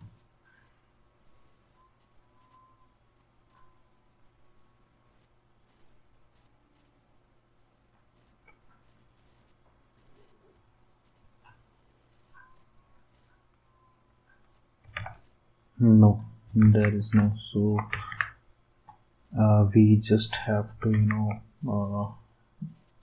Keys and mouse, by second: 14.9 alt+Tab, 16.6 ctrl+s, 17.9 ctrl+s, 20.9 ctrl+s.